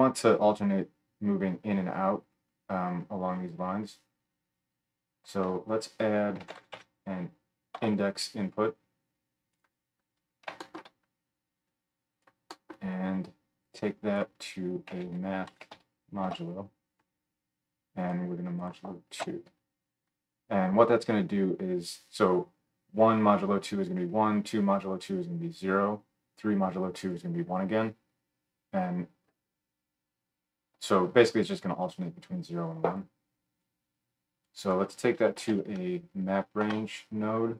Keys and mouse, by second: 5.4 F3, 9.7-11.7 middle drag, 11.7-18.1 drag, 18.1 middle click, 18.6-37.5 drag.